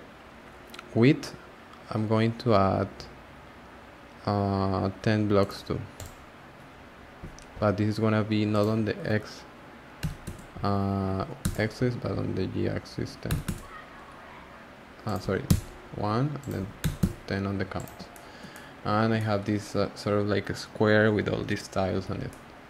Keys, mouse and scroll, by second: 5.4-6.8 drag, 6.8-8.5 scroll down 1, 8.5-17.8 drag, 18.0 scroll down 1, 18.1 shift+middle click, 18.8-19.1 scroll up 1, 19.1-19.5 shift+middle drag, 19.5 scroll up 1, 19.6-21.5 scroll down 1, 21.5-22.1 scroll down 1, 22.1 scroll down 1, 22.3-22.6 middle drag.